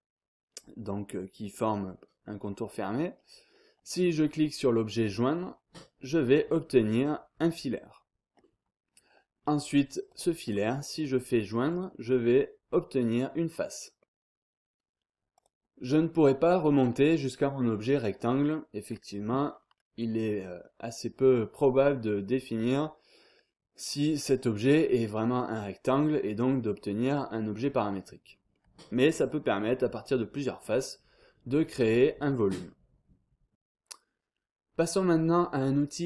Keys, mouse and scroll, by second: 5.0 click, 6.3 click, 10.1 click, 11.7 click, 14.0 scroll down 1, 14.2-14.8 scroll up 1, 15.3 click, 19.5 scroll down 1, 19.8-20.5 scroll up 1, 20.6-21.2 scroll down 1, 22.5-26.4 drag, 26.4 scroll down 1, 26.6-27.2 scroll up 1, 27.2 scroll down 1, 27.5-28.1 scroll up 1, 28.3 scroll down 1, 28.5-29.2 scroll up 1, 29.8 scroll down 1, 30.0-30.6 scroll up 1, 30.6-31.2 scroll down 1, 31.5-32.3 scroll up 1, 32.5-32.9 scroll down 2.